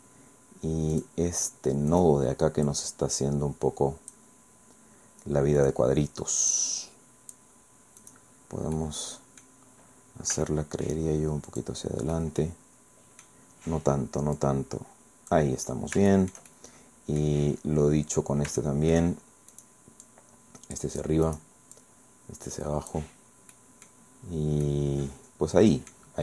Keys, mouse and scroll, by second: 1.0 click, 1.9 right click, 2.6-4.3 drag, 5.6 right click, 6.5-7.5 drag, 8.0 click, 8.8 click, 10.3 g, 11.5 click, 12.2 scroll down 1, 14.4-15.5 drag, 16.1-17.4 shift+middle drag, 18.6 shift+middle click, 19.5 click, 20.0 click, 21.2 click, 21.8-23.1 drag, 23.5 click, 24.0-24.6 scroll down 1, 24.6-26.1 drag.